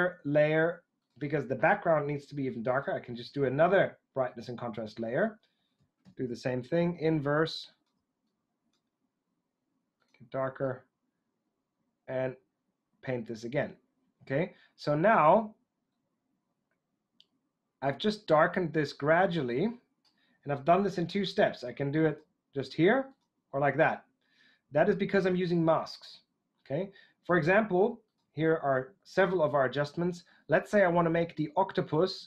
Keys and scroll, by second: 5.9 super+i.